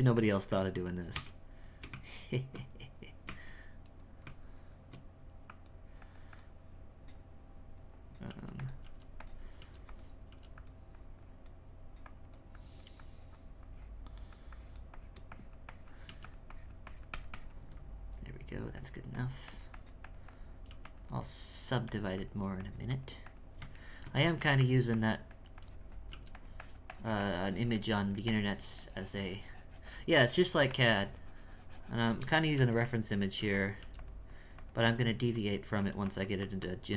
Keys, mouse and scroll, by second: 0.1 click, 1.1 space, 1.7 space, 1.9 Tab, 3.2 Tab, 3.9 right click, 4.2 Tab, 5.5-8.3 drag, 8.3 f, 8.8 f, 10.2 f, 10.9-16.0 drag, 16.0 f, 16.5-20.7 drag, 20.7 f, 21.9-23.8 drag, 23.8 shift+middle click, 24.2 f, 24.6-26.1 drag, 26.6-28.0 drag, 28.0 shift+middle click, 28.3-30.2 shift+drag, 30.2 shift+middle click, 30.7-32.5 shift+drag, 33.4 f, 34.3 click, 35.3-36.9 drag.